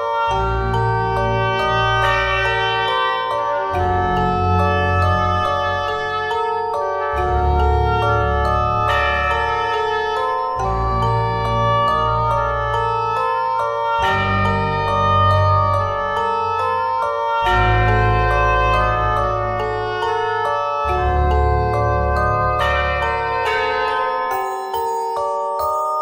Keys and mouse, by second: 2.1 middle click, 2.8-4.2 drag, 3.5 s, 4.6 s, 6.8 click, 7.4 s, 8.2 middle click, 9.8 Tab, 12.6 ctrl+r, 15.7 ctrl+Tab, 17.2 i, 18.1 i, 21.5 ctrl+z, 22.0 ctrl+z, 23.3 i, 24.2 i, 25.1 i, 25.8 i.